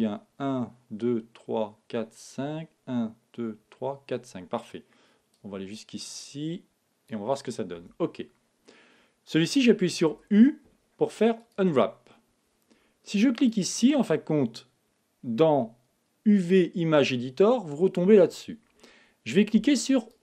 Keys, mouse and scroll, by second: 10.1 u, 13.3-15.3 drag, 20.1 click.